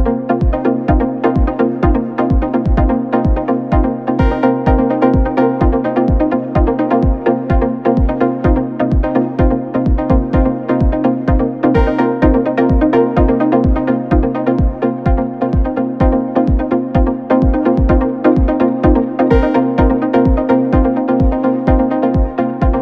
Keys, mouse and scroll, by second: 0.8 s, 6.6 r, 13.5-16.1 drag, 16.1 n, 17.6-20.0 drag, 20.0-20.3 scroll up 3, 20.7 scroll up 8, 21.7-22.6 scroll up 5, 22.6 shift+a.